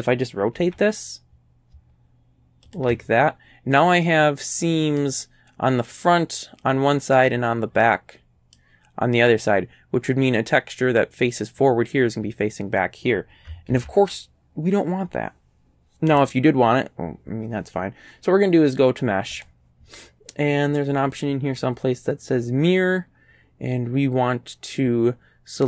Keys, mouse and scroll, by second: 0.6 r, 2.7 ctrl+click, 4.1-5.2 drag, 7.8 middle click, 13.7 ctrl+z, 16.2 click, 19.4 click.